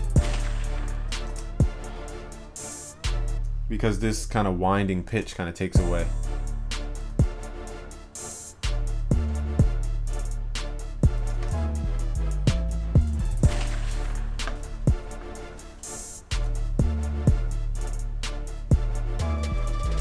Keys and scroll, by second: 1.4 ctrl+s, 5.5 ctrl+s, 7.2 ctrl+s, 11.5 ctrl+s.